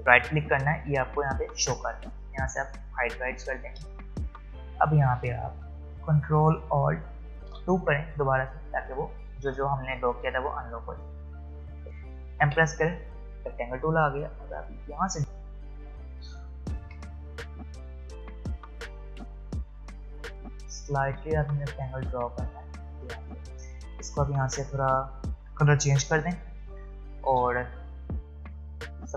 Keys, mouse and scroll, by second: 0.0 right click, 2.8 click, 4.1 space, 4.5 click, 4.6 space, 7.5 ctrl+alt+2, 9.3 click, 9.3 click, 11.9 v, 12.4 m, 15.0-23.5 drag, 23.9 click, 26.0 v, 26.5 space, 26.9 click, 27.0 space, 27.9-29.1 drag.